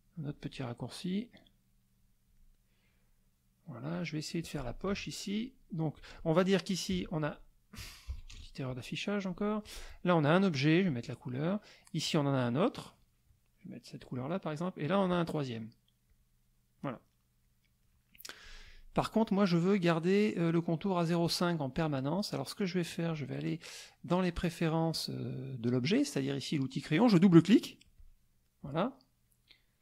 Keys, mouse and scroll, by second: 1.0-2.1 drag, 2.4-3.9 drag, 4.9 F6, 6.9 F2, 7.3 click, 8.1 KP_Subtract, 8.3 KP_Add, 9.6 click, 10.8 click, 12.0 click, 13.9 click, 14.9 click, 16.1 click, 16.8 click, 17.1 middle click, 17.8 middle click, 18.6 click, 23.1 click, 27.8 click.